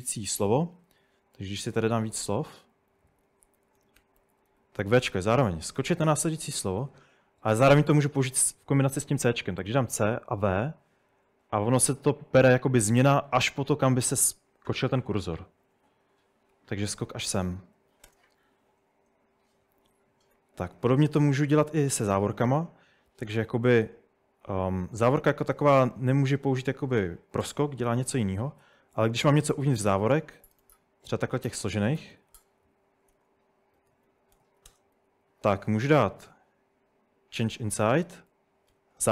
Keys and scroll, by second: 0.1-7.0 typing, 9.7-10.5 typing, 15.2-18.4 typing, 16.5 Escape, 19.6-22.9 typing, 24.8-28.6 typing, 29.5 Escape, 30.6 shift+Tab, 31.2-36.0 typing, 37.4-38.7 typing.